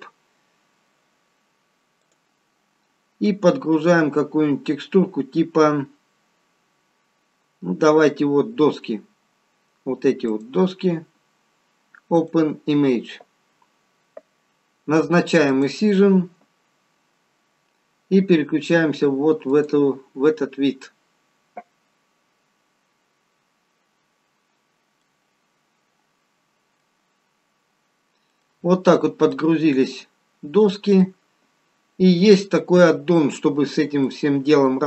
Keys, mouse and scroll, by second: 17.7 click, 24.5-24.9 scroll down 1, 24.9 middle click, 27.4-27.9 scroll up 1, 27.9-28.3 scroll down 1, 28.3 middle click, 28.9-30.7 scroll up 2, 29.2 middle click, 31.5-32.3 scroll down 3, 32.6 middle click, 34.0 middle click.